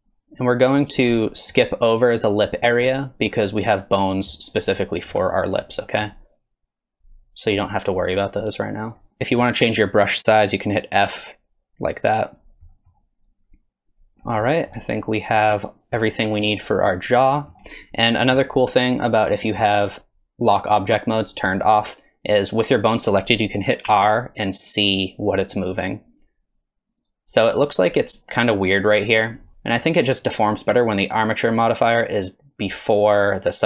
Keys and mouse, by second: 0.1 click, 1.1 middle click, 4.9 shift+middle click, 5.6 middle click, 6.4-8.3 drag, 8.6 click, 12.3 f, 12.7 click, 13.3 click, 14.1 f, 14.5 click, 15.4 click, 16.9 middle click, 17.4 middle click, 19.9-21.4 drag, 23.9 r, 32.1-33.6 drag.